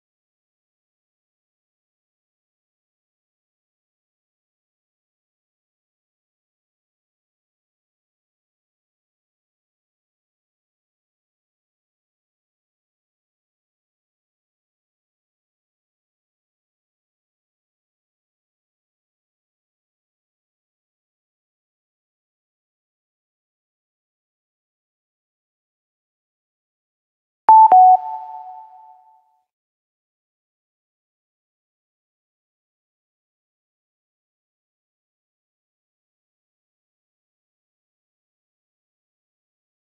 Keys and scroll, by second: 28.9 ctrl+s, 36.2 space.